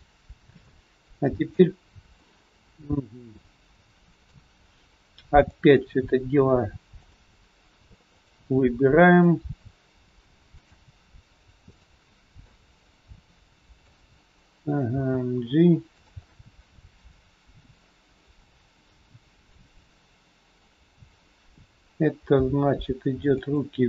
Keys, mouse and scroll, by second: 0.6 scroll up 1, 0.7 middle click, 3.8 middle click, 5.3 click, 7.1 shift+click, 8.1 click, 9.1 click, 10.7 shift+click, 11.7 shift+click, 12.4 middle click, 14.9 g, 16.3 middle click, 20.8 scroll down 1, 22.3 g.